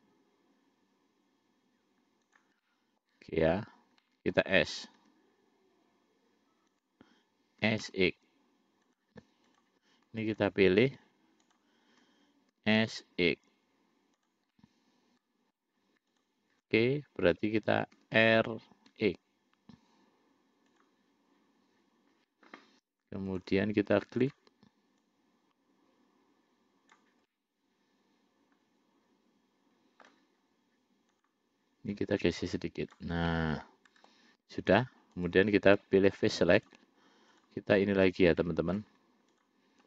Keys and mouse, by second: 2.9 middle click, 4.3 middle click, 5.3 s, 7.9 s, 9.8 click, 10.7 shift+click, 11.8 shift+click, 12.8 s, 14.8-15.9 middle drag, 16.4 shift+click, 18.3 r, 23.6 click, 24.5 click, 25.3-27.3 drag, 27.6-30.4 middle drag, 32.2-33.3 drag, 33.6 middle click, 35.5 click, 36.0 middle click, 36.8 click, 38.7 middle click, 39.6 click.